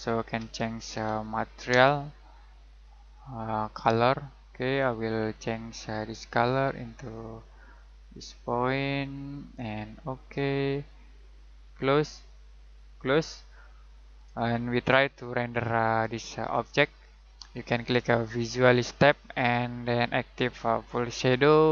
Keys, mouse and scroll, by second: 0.0-1.7 typing, 2.8 click, 14.5 middle click, 16.6 middle click, 18.2 click.